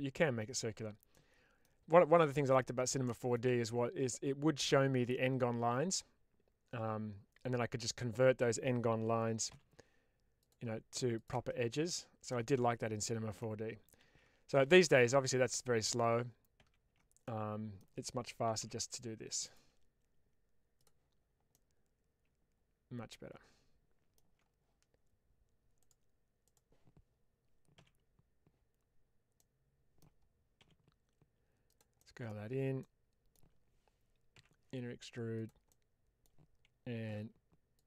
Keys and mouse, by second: 1.1 middle click, 2.5 middle click, 3.0 shift+middle click, 9.4 k, 12.2-13.3 middle drag, 13.9 ctrl+z, 14.5 ctrl+z, 15.5 ctrl+z, 16.5 ctrl+z, 17.1 middle click, 19.3 click, 20.6 click, 21.4-24.1 middle drag, 25.7 click, 26.3 click, 27.6 s, 29.3 middle click, 30.5 s, 31.6 click, 31.9 middle click, 32.7 middle click, 35.2 click, 35.6 middle click, 37.0 x.